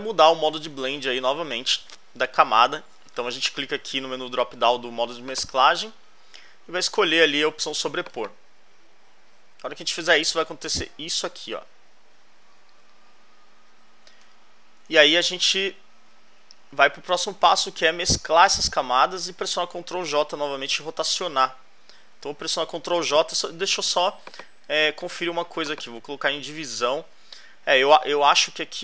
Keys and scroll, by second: 0.9 alt+Right, 9.9 alt+Left, 15.0 alt+Left, 20.2 alt+Right, 28.2 alt+Left.